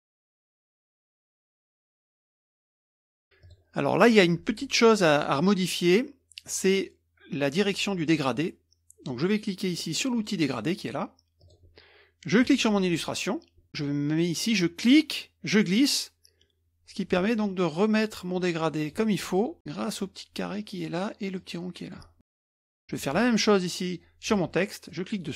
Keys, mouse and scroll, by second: 0.4 click, 1.2 middle click, 1.6 click, 1.9 middle click, 1.9-2.5 scroll up 1, 2.8 KP_Subtract, 2.8 KP_Subtract, 3.4-4.0 drag, 11.4 click, 12.4 click, 14.8-19.2 drag, 19.6 click, 21.3 click, 22.4 click, 22.7 middle click, 24.3 click, 24.8-25.3 middle drag.